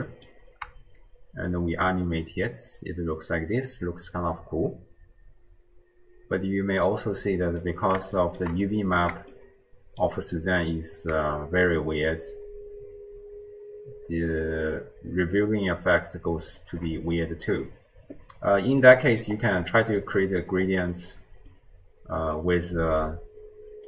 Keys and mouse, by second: 0.1 middle click, 1.0-7.7 shift+drag, 8.3 shift+middle click, 8.9-9.3 middle drag, 9.4-10.1 shift+middle drag, 11.6-16.7 shift+drag, 18.8 middle click, 21.5 click, 21.5 right click, 22.3 middle click.